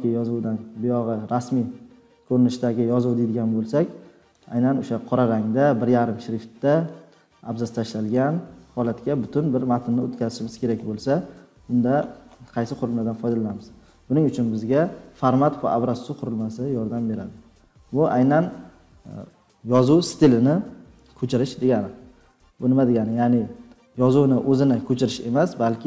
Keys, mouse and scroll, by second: 1.2 click, 2.7 scroll down 2, 3.3-3.8 scroll down 3, 4.4 click, 7.9 scroll up 3, 9.4 scroll down 4, 9.6-11.0 scroll, 11.0 scroll down 10, 11.6 scroll up 5, 11.8-13.3 scroll, 14.6 scroll up 3, 17.4-17.8 scroll down 4, 17.8 scroll, 17.9-18.2 scroll down 3, 18.2 scroll, 18.3-20.0 scroll down 3, 20.0-21.1 scroll down 1, 21.1 scroll down 1.